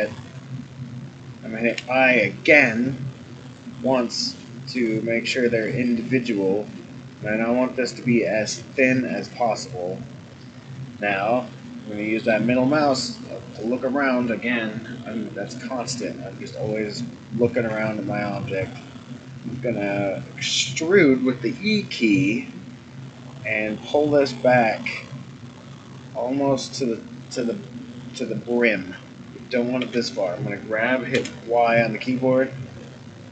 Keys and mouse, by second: 11.0-12.3 middle drag, 14.8 middle click, 17.7 e, 27.2-28.5 middle drag, 29.8 g.